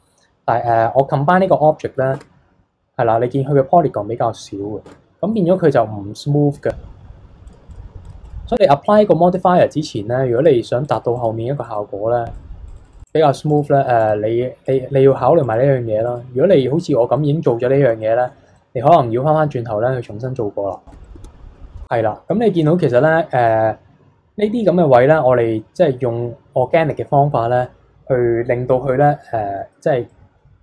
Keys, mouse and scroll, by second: 2.1 Tab, 4.8 Tab, 5.3-7.2 middle drag, 7.2 f, 7.7-12.4 drag, 12.4 middle click, 12.6-16.7 drag, 16.7-17.1 scroll down 4, 17.1-19.1 middle drag, 19.1-20.1 scroll up 2, 20.1-21.0 scroll down 6, 20.9 shift+middle click, 21.0 scroll up 2, 21.0 middle click, 21.8 scroll down 1, 22.0-22.6 scroll up 6, 22.6-26.4 middle drag, 29.2 middle click, 29.6-30.0 scroll down 2, 30.0-30.6 middle drag.